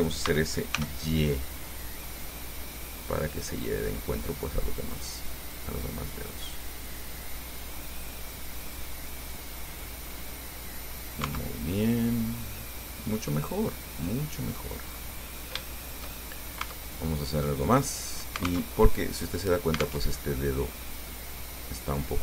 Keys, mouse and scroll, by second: 0.5 s, 1.0 y, 2.8 scroll down 2, 7.4-7.8 scroll down 2, 8.0 scroll down 2, 10.0 click, 10.5-11.6 drag, 11.5 Tab, 12.0-13.3 drag, 13.8 scroll down 2, 14.3 click, 15.1-15.8 scroll up 4, 15.9 shift+click, 16.4 shift+scroll up 2, 16.9 shift+Tab, 17.5 right click, 18.0 middle click, 18.6 alt+click, 18.9 alt+Tab, 20.3 alt+Tab, 20.4 alt+click, 21.3 click.